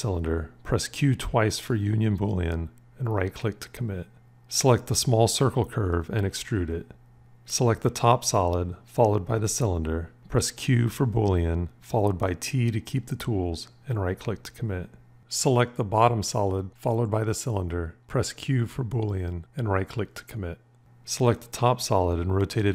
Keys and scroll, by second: 0.6 q, 0.7 q, 11.4 q, 12.3 t, 18.7 q, 22.4 v.